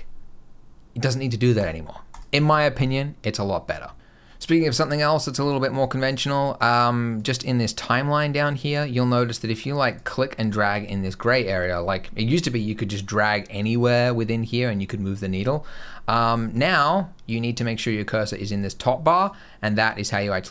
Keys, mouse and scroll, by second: 1.4 click, 2.0 click, 2.4 click, 7.0 click, 9.1 click, 9.8 click, 13.0 click, 19.1 click.